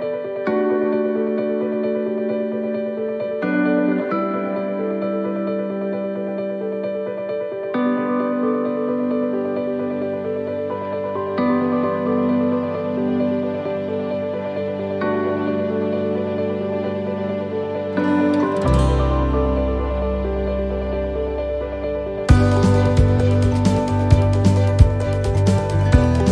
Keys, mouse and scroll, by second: 2.8 right click, 2.8 middle click, 3.6 c, 6.7 middle click, 7.2 c, 8.5 middle click, 9.6 click, 12.6 middle click, 13.2-13.6 scroll down 2, 13.6 middle click, 15.2-15.6 scroll up 2, 15.6 middle click, 16.6 middle click, 20.6 middle click, 22.0 middle click, 26.2 c.